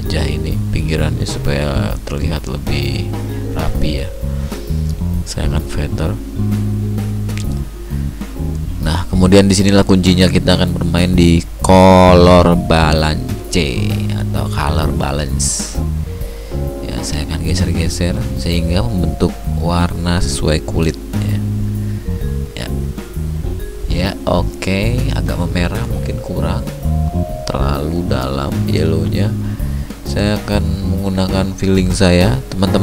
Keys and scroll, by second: 0.1 ctrl+d.